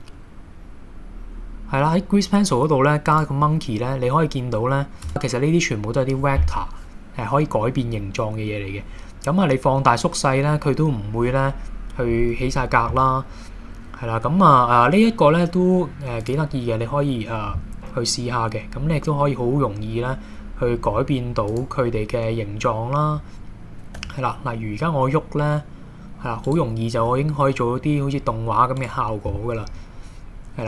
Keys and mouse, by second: 5.1 Tab, 21.5 click, 24.0 g, 27.0 g.